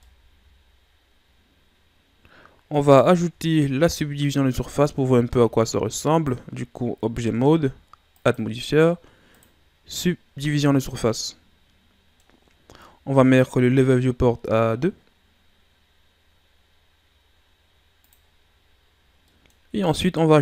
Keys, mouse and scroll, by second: 0.0-3.0 middle drag, 3.0-3.3 scroll up 1, 3.3 Tab, 4.5 Tab, 6.0 right click, 8.1 click, 9.4-10.4 drag, 10.4-13.4 middle drag, 18.0-19.2 drag, 19.2 middle click, 19.7-20.4 scroll up 3.